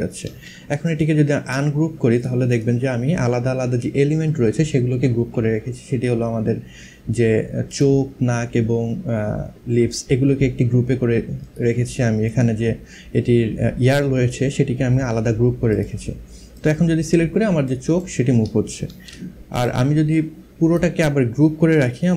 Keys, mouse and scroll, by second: 0.5 right click, 1.8 click, 7.4 click, 11.1 click, 15.3 click, 17.3 click, 18.5 ctrl+z, 19.1 click.